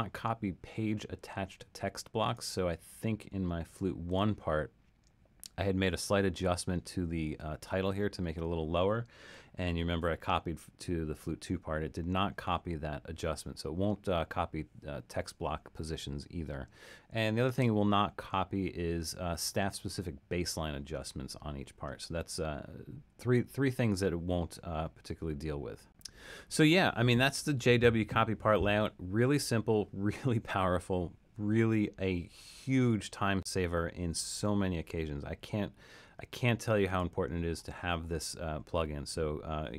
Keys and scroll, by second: 9.9 alt+super+..